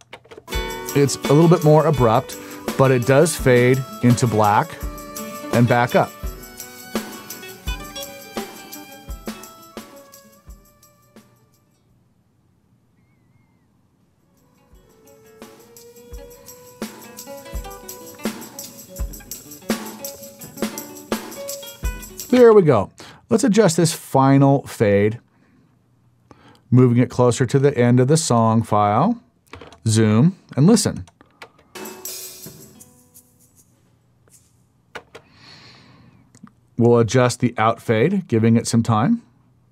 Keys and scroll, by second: 0.1 space, 22.4 space, 31.4 space, 35.0 space.